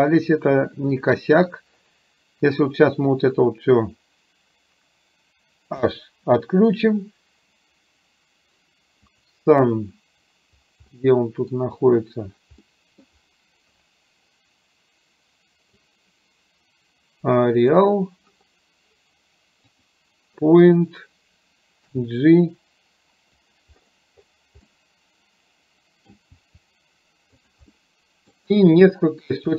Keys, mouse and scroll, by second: 3.1-4.1 drag, 5.9 h, 9.2 click, 10.9-11.6 middle drag, 12.7-13.1 middle drag, 16.1-17.8 drag, 19.8 click, 21.9 g, 24.7-26.2 middle drag, 26.4 g, 27.8-28.4 middle drag, 28.9-29.3 middle drag.